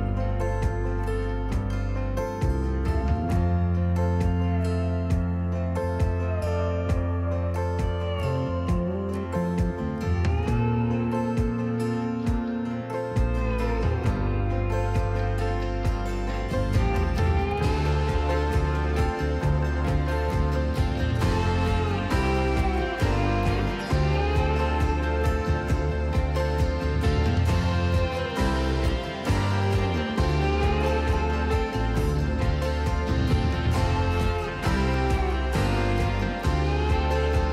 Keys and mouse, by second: 0.3 s, 3.7 s, 5.0 click, 5.6 s, 7.3 click, 8.5 click, 9.5 Delete, 11.8 click, 13.3 r, 14.6 y, 14.9 KP_9, 15.0 KP_0, 15.8 Escape, 16.7 r, 17.1 y, 17.4 KP_Subtract, 17.7 KP_9, 17.8 KP_0, 18.2 KP_Enter, 21.6 s, 22.4 click, 22.8 g, 23.1 z, 24.1 click, 26.2-27.0 typing, 28.4 click, 29.2 r, 29.4 z, 31.0 click, 32.1-33.6 middle drag, 34.1 typing, 35.1-36.4 middle drag, 37.2 KP_1.